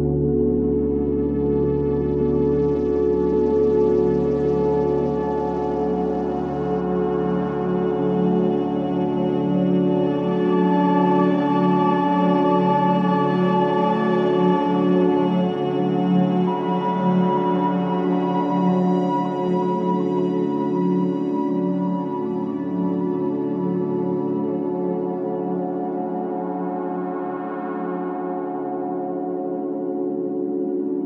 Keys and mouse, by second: 0.0-0.8 drag, 1.3 click, 2.3 click, 4.0 click, 4.7 click, 6.6 click, 8.7 click, 9.5-11.3 drag, 11.5-12.1 typing, 12.8-13.7 drag, 13.2 typing, 14.6 typing, 15.1-20.8 drag, 21.4-22.3 drag, 21.9 typing, 23.9-24.9 typing, 24.4-27.2 drag, 26.7 space, 27.6 space, 28.4-30.2 drag, 29.6 space, 30.6-31.0 typing.